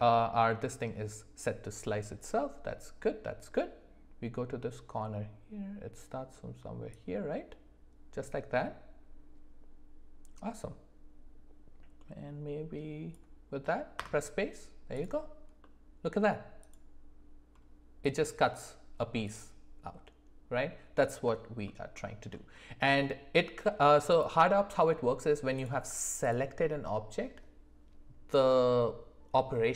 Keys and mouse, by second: 6.9 click, 7.5-14.3 drag, 14.9 click, 15.6 middle click, 19.2 click, 21.9 alt+middle click.